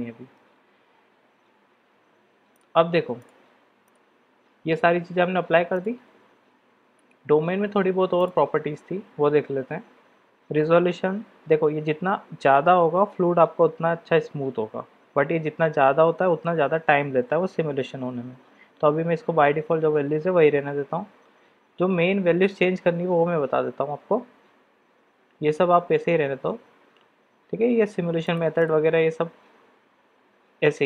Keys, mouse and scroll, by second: 2.5-3.2 drag, 3.8 click, 5.7 click, 28.3 click.